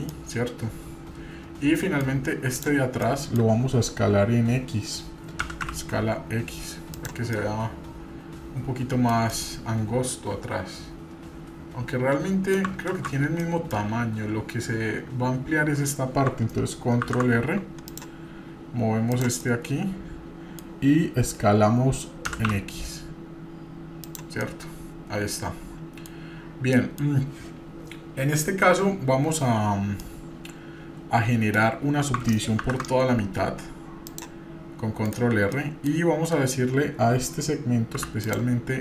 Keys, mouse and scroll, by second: 0.1-2.0 middle drag, 2.5 click, 3.0 middle click, 5.4 s, 7.3-9.1 middle drag, 9.3-12.5 middle drag, 12.9 ctrl+z, 13.4 middle click, 17.0 ctrl+r, 19.4-20.6 middle drag, 22.3 s, 24.4-26.1 middle drag, 26.7 middle click, 30.0-31.5 middle drag, 32.6 ctrl+r, 35.6 middle click, 38.0 e.